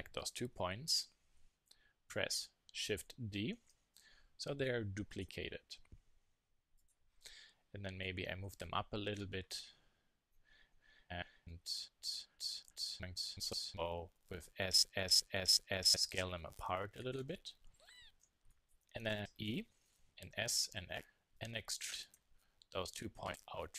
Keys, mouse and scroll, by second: 3.5 shift+d, 6.7 click, 14.4-16.1 middle drag, 14.9 s, 16.9-18.4 drag, 18.3 z, 18.8-20.0 middle drag, 20.0 e.